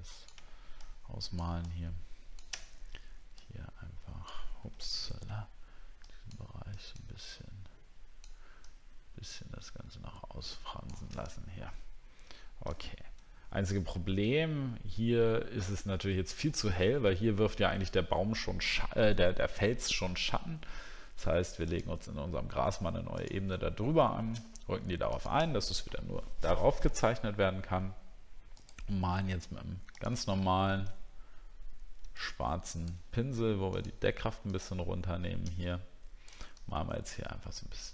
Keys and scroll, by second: 11.2 alt+scroll down 1, 11.9 alt+scroll down 1, 13.9 alt+scroll down 1, 16.4 alt+scroll up 1.